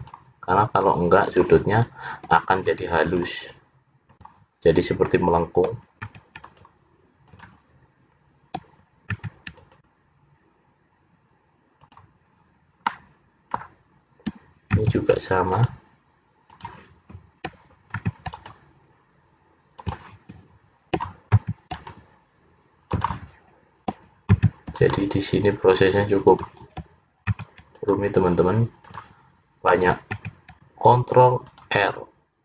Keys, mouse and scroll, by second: 0.1 ctrl+r, 2.8 ctrl+r, 6.2 ctrl+r, 9.6 ctrl+r, 12.9 middle click, 14.8 ctrl+r, 18.1 ctrl+r, 21.5 ctrl+r, 24.5 ctrl+r, 27.7 ctrl+r, 30.3 ctrl+r.